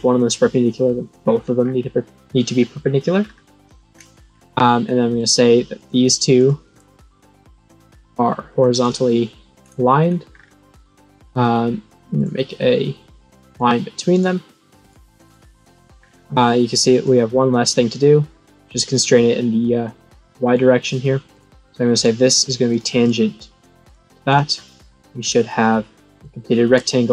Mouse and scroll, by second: 0.3 middle click, 1.2-2.9 scroll down 7, 2.9-3.3 scroll down 1, 4.3 scroll up 4, 5.1 click, 5.7 click, 6.3 click, 8.2 click, 8.7 click, 9.6 scroll up 2, 10.3 scroll down 4, 12.1 click, 13.4 click, 14.1 click, 14.7 right click, 15.2 click, 16.0 scroll down 4, 16.9-20.5 drag, 21.3 click, 21.9 click, 22.6 click, 23.8 click, 24.2 click, 24.8-25.2 scroll down 5, 26.3 middle click.